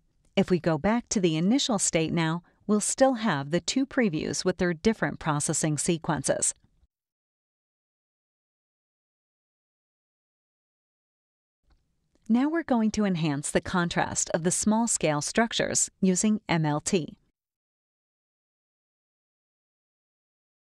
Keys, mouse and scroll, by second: 2.1 click, 4.1 click, 5.9 click, 7.2 click, 8.6 click, 9.8 click, 11.3 click, 12.1 click, 12.8 click, 14.5 click, 15.7 space, 16.0-17.1 drag, 20.4 click.